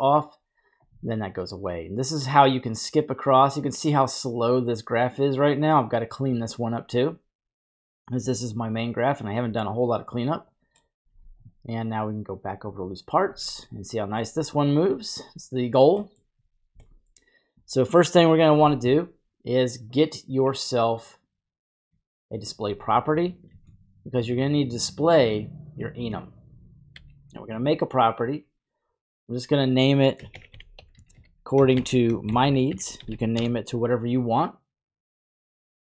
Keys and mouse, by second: 2.3-6.0 drag, 8.8-10.9 middle drag, 11.2 n, 12.7 click, 13.2 n, 13.7 middle click, 16.1 middle click, 16.9 middle click, 20.0 click, 20.3 click, 21.0 click, 22.3 click, 23.5 shift+d, 24.5 click, 25.3 click, 25.6 click, 26.9 n, 29.3-33.4 drag, 30.9 s.